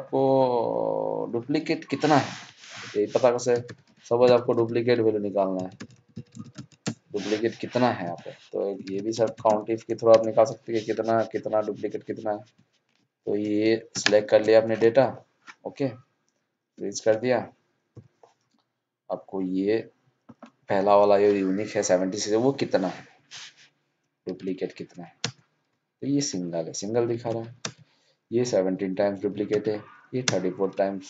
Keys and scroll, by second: 13.9 ctrl+shift+Down, 27.0 ctrl+c.